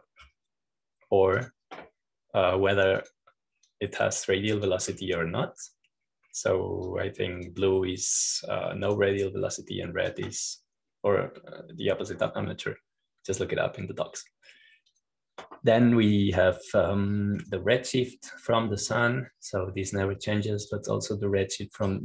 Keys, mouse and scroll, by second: 0.0-2.2 drag, 3.3 click, 4.9 click, 5.5-7.3 drag, 8.0-8.7 scroll up 1, 8.7-13.3 drag, 13.3-13.7 scroll up 1, 14.5-17.7 drag, 19.3-22.0 drag.